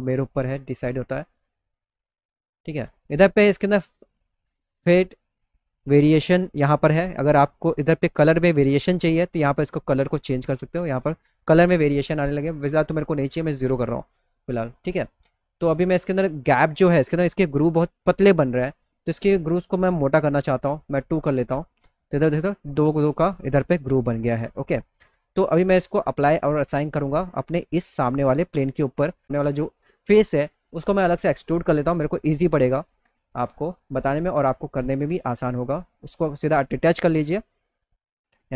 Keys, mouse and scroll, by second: 1.4 right click, 9.2 click, 12.1 right click, 15.6 click, 24.9 click, 26.1 click, 27.2 middle click, 27.6 middle click, 28.3 middle click, 28.6 middle click, 28.9 middle click, 30.8 click, 33.3 click, 35.6 click, 37.2 click.